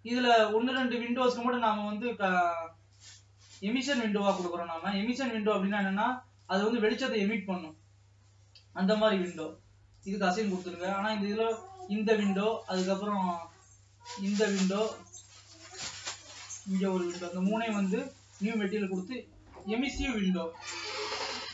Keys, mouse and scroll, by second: 0.1 scroll down 2, 1.0-1.9 scroll up 2, 1.9-3.2 shift+middle drag, 3.2-12.9 drag, 12.9 scroll down 2, 13.2-14.5 shift+middle drag, 14.5-17.0 shift+drag, 18.5-21.5 drag.